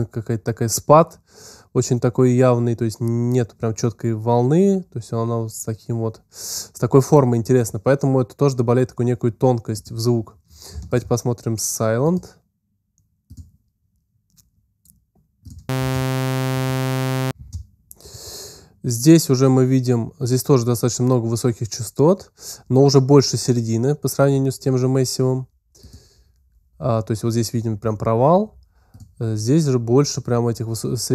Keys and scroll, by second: 15.6 space, 17.2 space.